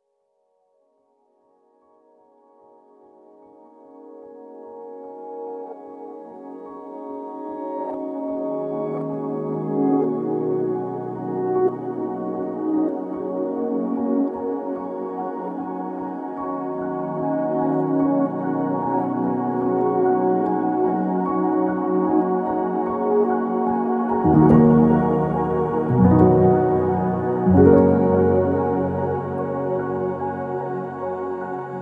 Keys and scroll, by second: 3.5 Escape, 4.4 Escape, 9.3-10.2 typing, 13.7 ctrl+z, 14.3-17.6 typing, 21.2 ctrl+c, 21.7 ctrl+v, 27.2-29.5 typing, 27.6 Escape, 28.1 Return, 29.6 Return, 30.7 ctrl+c, 30.7 ctrl+v.